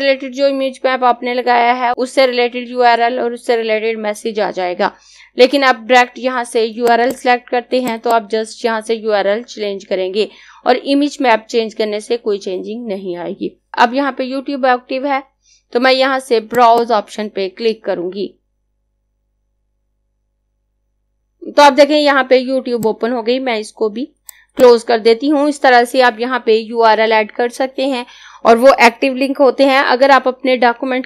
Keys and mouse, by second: 6.8 click, 16.5 click, 21.1 click.